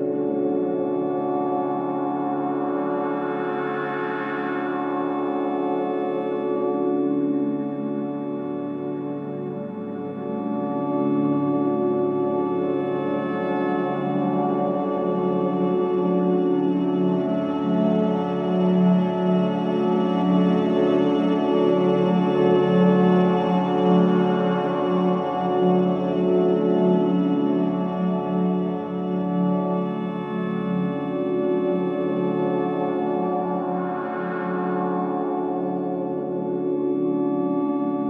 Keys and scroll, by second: 1.6 Delete, 6.1 f, 17.6 f, 34.6 Delete, 35.8 Delete.